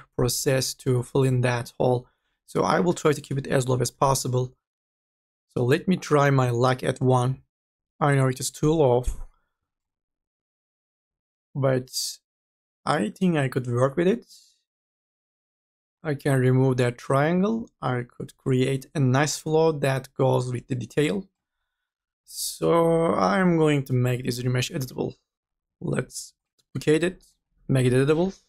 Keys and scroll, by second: 4.0 5, 7.3 KP_1, 27.4-28.4 typing.